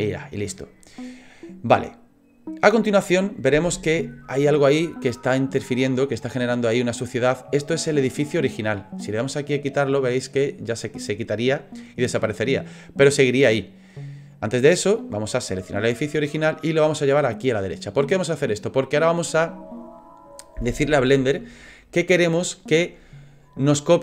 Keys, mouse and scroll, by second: 1.9 right click, 4.1 scroll up 4, 4.6 middle click, 7.5-7.9 scroll down 4, 9.6 click, 9.6-10.3 scroll down 1, 10.3 click, 10.6 click, 12.0 click, 15.6 click, 16.9 click, 18.4 middle click.